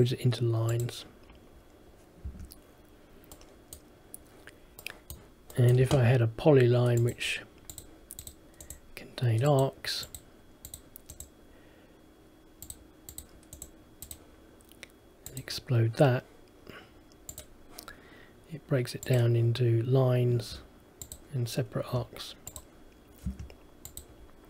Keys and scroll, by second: 2.4 Escape, 20.5 Escape.